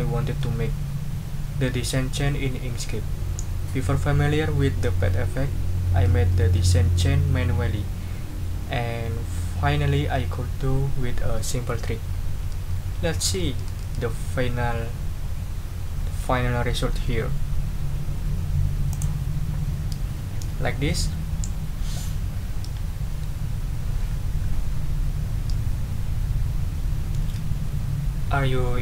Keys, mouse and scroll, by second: 18.9 click.